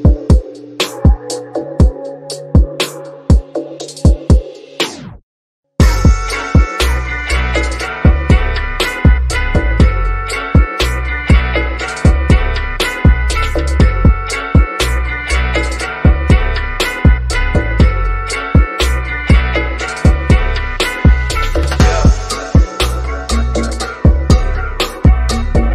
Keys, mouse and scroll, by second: 0.4 click, 1.6 typing, 3.1 click, 4.6 typing, 6.6 click, 12.5 click, 16.1 9, 17.3 click, 24.0 click, 25.2 1.